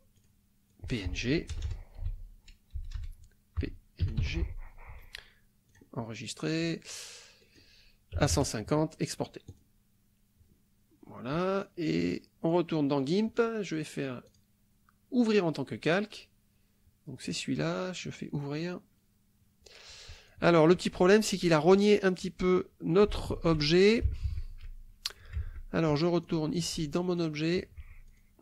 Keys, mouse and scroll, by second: 0.2 click, 0.7 click, 1.5-4.7 typing, 5.7 click, 7.4 click, 8.2 KP_1, 8.3 KP_0, 9.5 click, 12.5 click, 14.3 click, 15.2 click, 17.3 click, 18.4 click, 20.3 click, 24.1 alt+Tab, 25.5 alt+Tab, 26.3 alt+click, 27.1 alt+click, 28.1 click.